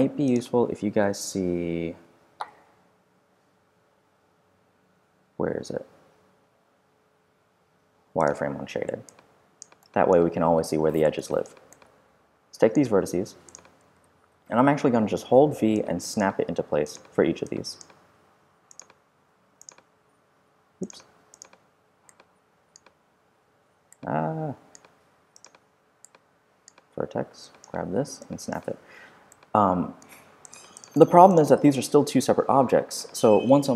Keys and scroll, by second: 13.9 w, 14.3 v, 17.2 v, 18.9 v, 27.9 v.